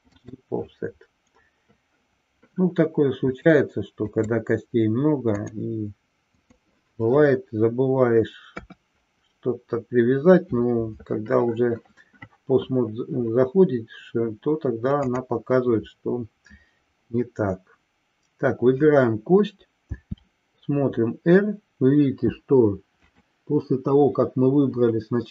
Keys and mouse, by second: 3.3-4.8 drag, 5.6-6.6 drag, 8.4 KP_3, 15.0-17.3 drag.